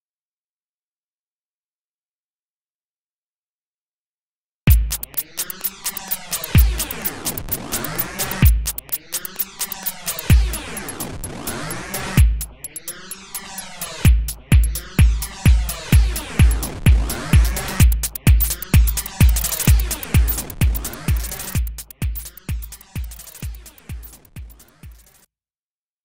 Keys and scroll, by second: 4.6 a, 10.1 shift+e, 12.1 z, 17.7 shift+r.